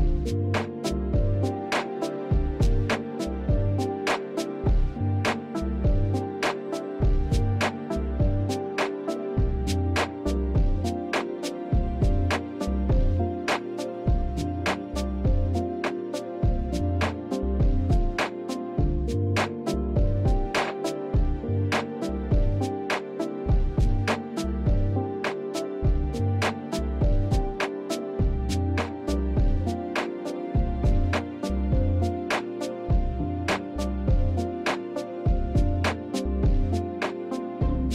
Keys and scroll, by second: 0.7 space, 5.2 space, 14.9 space, 22.8 space, 30.0 space, 33.4 space.